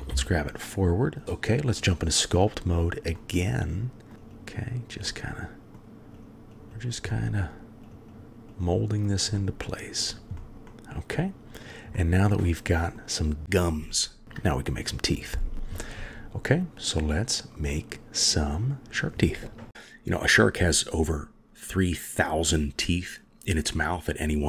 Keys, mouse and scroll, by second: 1.2 click, 3.2-4.1 middle drag, 4.1 click, 4.3 click, 4.5 click, 5.1 middle click, 6.1 click, 6.5 click, 6.7 click, 7.1 middle click, 7.8 click, 8.1 click, 8.5 click, 8.9 click, 9.3 middle click, 10.0 click, 10.4 middle click, 10.7-11.1 middle drag, 12.0-13.0 middle drag, 14.0 KP_3, 17.7 middle click, 19.7-21.9 middle drag, 22.5-24.2 middle drag.